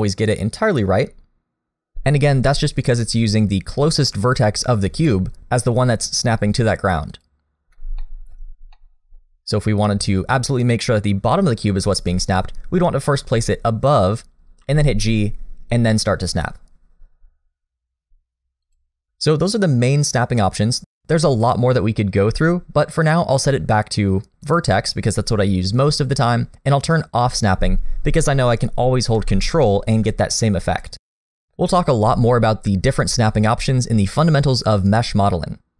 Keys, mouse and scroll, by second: 8.0 shift+middle click, 8.7 middle click, 12.0 g, 14.6 g, 21.1 click, 28.9 g, 32.2 click.